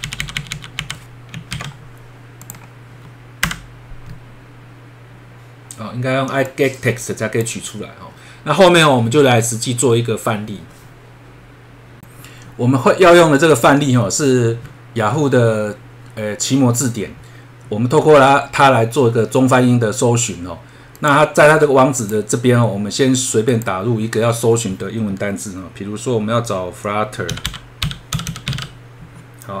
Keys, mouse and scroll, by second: 1.5 ctrl+s, 2.4 click, 3.4 F5, 6.4 click, 8.1-9.3 scroll down 1, 12.0 F3, 21.0 click, 22.0 click, 23.5 click, 27.2-29.0 typing.